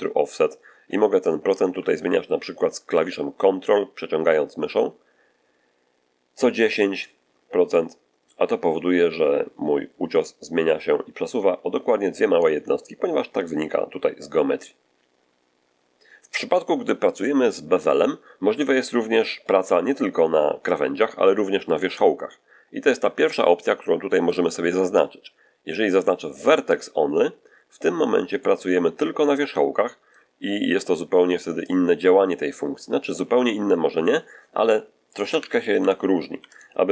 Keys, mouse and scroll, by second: 1.1-12.5 drag, 26.6 click, 28.2-30.2 middle drag, 31.5-33.1 drag, 35.1 1, 35.7 Tab, 36.3 x, 36.4 click.